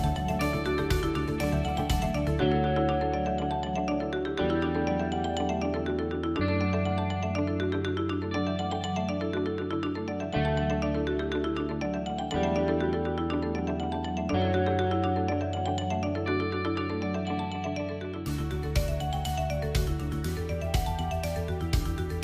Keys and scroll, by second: 1.2 g, 7.1 Tab.